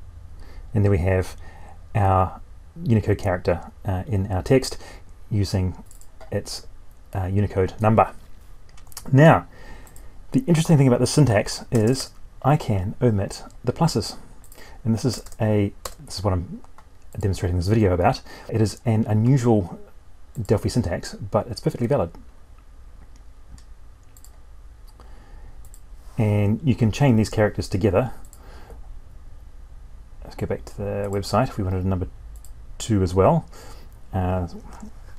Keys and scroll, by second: 34.8 alt+Tab.